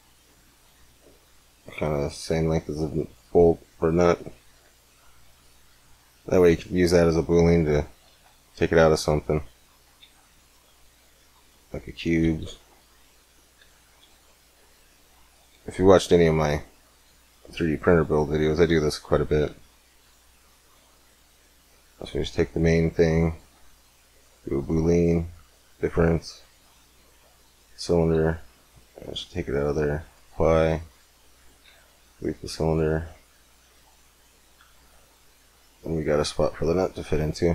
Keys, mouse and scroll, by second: 0.9 s, 3.3 middle click, 4.4 z, 5.3 click, 6.1 click, 7.9 shift+a, 9.8 shift+a, 12.2 KP_1, 13.4 z, 13.8 g, 15.8-17.0 right drag, 16.2 s, 17.6 z, 18.1 middle click, 19.1 middle click, 20.1-22.7 drag, 22.7 right click, 23.5-27.9 drag, 27.9 z, 28.4-30.6 drag, 31.2 x, 31.4 click, 31.5 click, 31.5 z, 32.2-34.2 middle drag, 34.4 g, 35.1 click, 35.6-36.7 middle drag, 36.7 g.